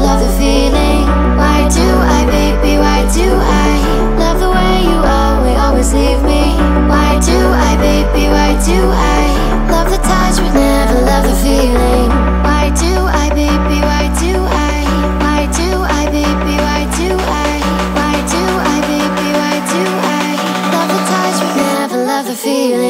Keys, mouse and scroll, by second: 1.4 ctrl+a, 3.9 click, 8.1 r, 13.9 w, 15.7 click, 16.9-21.2 drag.